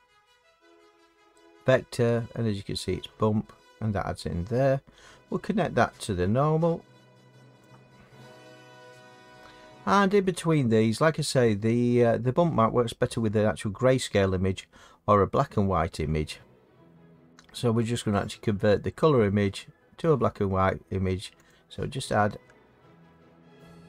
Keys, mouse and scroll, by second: 7.6 click, 9.0 middle click, 21.5 click.